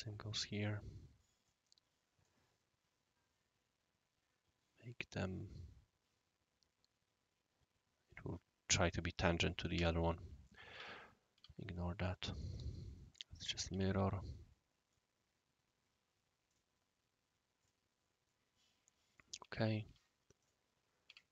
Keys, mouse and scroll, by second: 1.4 right click, 9.7 Escape, 10.7 l, 11.3 q, 12.3 click, 13.4 click, 13.7 Escape, 14.2-14.9 drag, 16.4 click, 17.0 click, 17.5 click, 18.2-20.0 right drag, 19.4 Escape, 19.8 d, 20.4 click, 21.0 Escape, 21.1-21.3 typing.